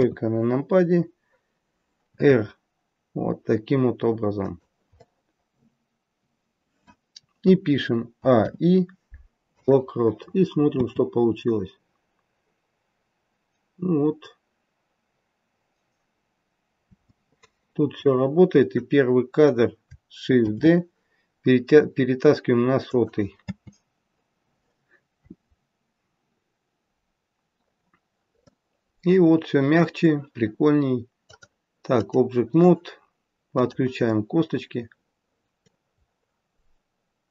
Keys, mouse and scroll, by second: 0.6-1.6 scroll up 1, 1.6-2.0 scroll up 2, 2.0 r, 5.0 middle click, 8.7 a, 8.7 i, 10.7 space, 16.9 space, 17.8 click, 20.4 shift+d, 23.5 space, 28.0-31.1 scroll down 2, 28.3 middle click, 31.1 click, 34.0 click, 34.0 middle click, 36.0-36.5 scroll up 2, 36.5-36.9 scroll up 1, 36.9-37.3 scroll down 1.